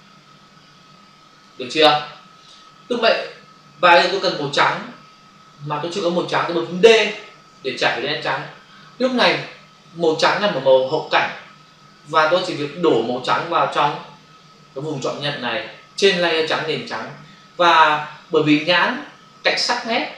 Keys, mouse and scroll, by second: 7.5 d.